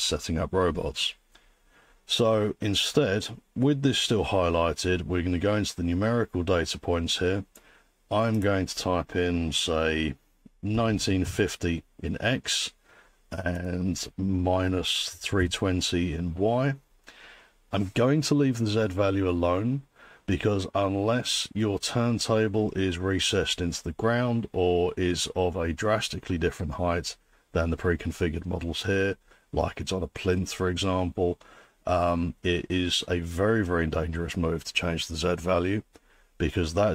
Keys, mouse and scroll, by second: 8.5 click, 10.5-11.7 typing, 13.7 click, 14.4-15.9 typing.